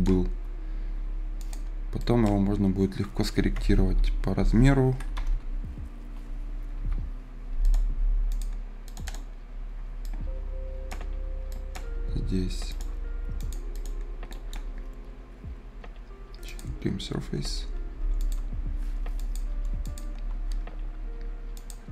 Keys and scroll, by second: 3.3-5.2 typing, 6.7 b, 17.9 Escape.